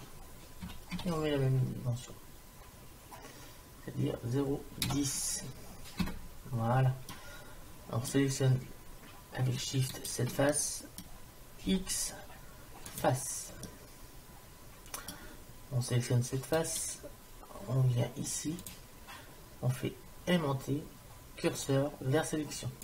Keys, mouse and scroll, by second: 7.1-8.9 middle drag, 10.0 right click, 10.6-12.6 middle drag, 11.7 x, 13.7-15.5 middle drag, 16.6-17.7 right drag.